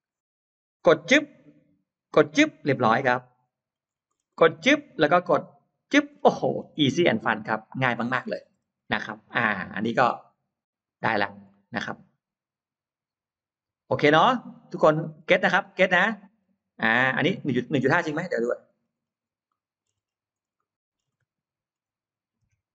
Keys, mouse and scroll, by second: 0.8 click, 1.5 scroll up 1, 2.2 click, 2.6-2.9 scroll down 1, 3.0 middle click, 3.6-4.3 scroll up 2, 4.5 click, 5.6 click, 6.0-7.2 scroll down 2, 6.2 middle click, 6.9-8.0 middle drag, 8.4-9.0 scroll up 2, 9.5-10.7 middle drag, 10.7-11.4 scroll down 2, 11.4-14.2 middle drag, 11.7-12.0 scroll down 2, 14.4-15.7 scroll up 4, 15.0 middle click, 15.5 middle click, 16.7 middle click, 18.0-18.3 scroll up 2, 18.2 middle click, 18.6-18.9 scroll down 2, 19.3 middle click, 19.3 scroll up 2, 19.8-20.6 scroll up 2, 20.6 middle click, 21.0 scroll up 2, 21.2 middle click, 21.4 middle click, 22.3 l.